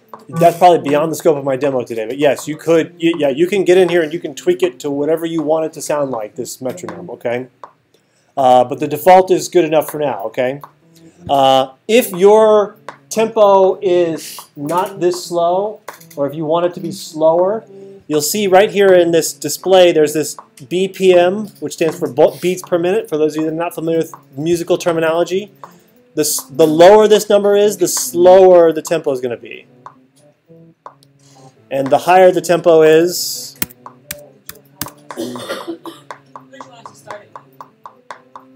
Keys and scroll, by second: 33.4-35.0 typing.